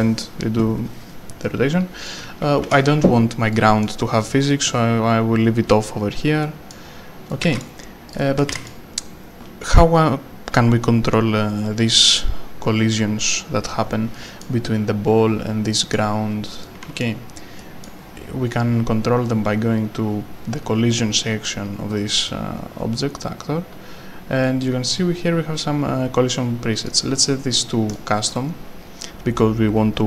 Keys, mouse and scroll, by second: 2.2-3.1 typing, 2.4 right click, 3.5 right click, 7.3 right click, 7.6-9.2 typing, 8.1 click, 8.2 right click, 14.4 right click, 17.0 a, 17.6 right click, 18.9 scroll down 1, 20.2 scroll up 1, 21.9-22.9 scroll up 1, 24.9-26.0 scroll down 1, 26.8 click, 28.5-29.7 scroll down 1.